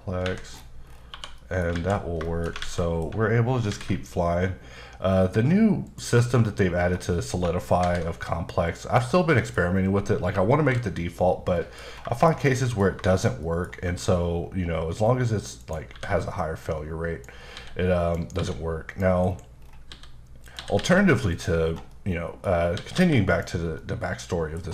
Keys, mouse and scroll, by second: 0.2 Escape, 0.5-1.1 scroll down 6, 1.1 1, 1.4 middle click, 1.7 alt+z, 2.5 middle click, 2.8 middle click, 3.7 alt+v, 5.9 click, 6.8-7.4 scroll up 2, 7.8 alt+v, 8.7 click, 9.3 middle click, 9.7-10.6 scroll down 1, 10.6 KP_5, 11.6 middle click, 11.9 scroll down 2, 12.2 shift+middle click, 13.1 shift+middle click, 15.6 shift+right click, 15.9 shift+a, 16.6 click, 18.0 click, 18.4-20.8 typing, 18.9 click, 19.6-19.9 scroll down 2, 20.5 click, 21.3 click, 21.6 scroll down 2, 21.9 middle click, 22.6 scroll up 1, 22.8 typing, 23.3 click, 23.6 scroll down 2, 23.8 scroll up 1, 23.8 middle click.